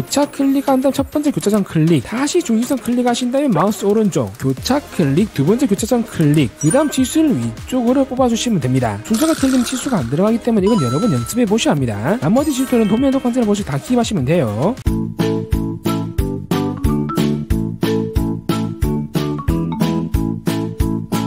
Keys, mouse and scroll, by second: 0.2 click, 1.8 click, 3.1 click, 3.6 right click, 5.2 click, 6.6 click, 8.4 click, 15.2 click, 15.8 click, 16.6 click, 17.1 click, 17.4 click, 17.6 middle click, 17.8 middle click, 18.1 click, 18.5 click, 19.1 click, 20.0 click, 20.3 click, 20.7 click, 21.0 click.